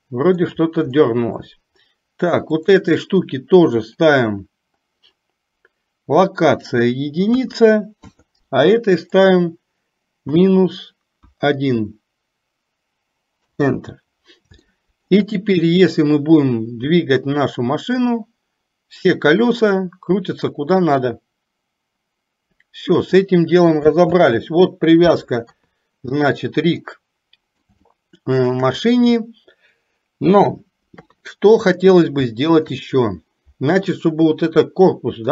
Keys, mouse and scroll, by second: 0.0 shift+middle click, 1.0 middle click, 2.7 click, 6.7-8.2 drag, 9.3-13.7 drag, 14.7 shift+middle click, 17.8-23.3 drag, 25.5 KP_3, 26.9-27.7 middle drag, 27.9-28.7 shift+middle drag, 29.3-30.4 middle drag, 31.0 KP_3, 32.4-32.8 middle drag.